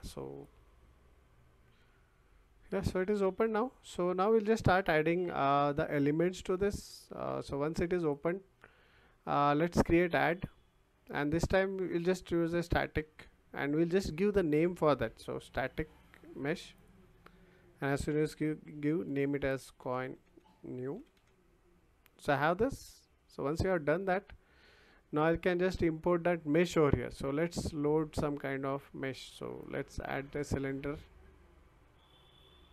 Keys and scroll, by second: 12.6 s, 13.0 t, 15.1 a, 19.2-21.6 typing.